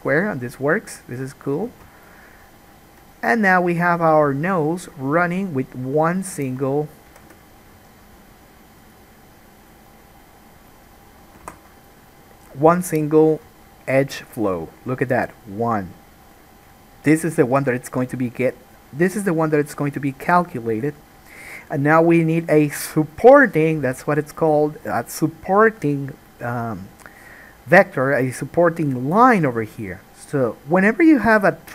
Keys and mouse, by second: 1.8 alt+a, 6.5 click, 7.3 g, 11.6 alt+a, 12.8 alt+a, 13.0 click, 13.2-14.1 middle drag, 14.1-14.7 shift+drag, 14.7-16.4 shift+middle drag, 16.4 click, 16.6-17.3 shift+middle drag, 17.3 shift+click, 17.4-24.8 shift+middle drag, 23.9 alt+a.